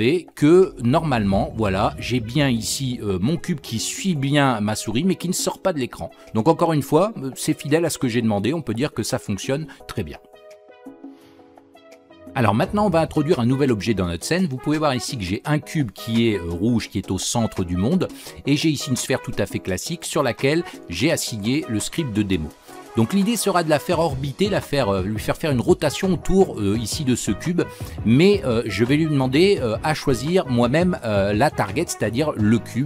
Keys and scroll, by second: 29.3 ctrl+k.